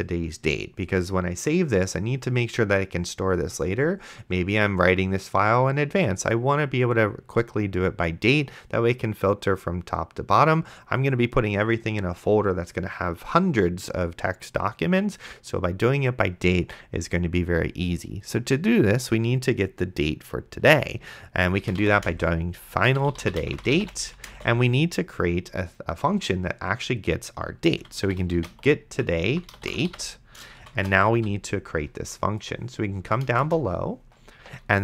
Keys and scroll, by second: 21.5-24.7 typing, 27.5-31.7 typing, 33.3 Return.